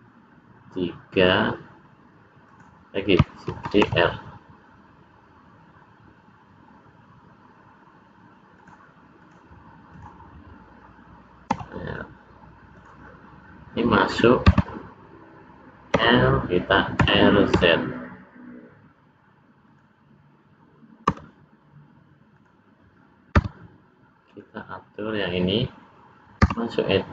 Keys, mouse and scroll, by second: 3.6 shift+d, 9.2 click, 9.9 click, 11.5 r, 14.6 Tab, 16.0 l, 17.0 r, 21.2 l, 22.3 click, 23.5 Tab, 24.2 click, 26.5 Tab.